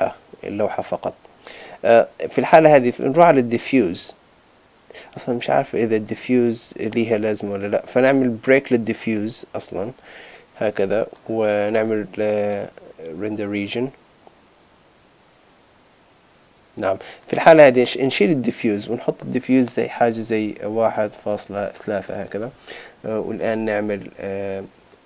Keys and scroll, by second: 22.1 Return.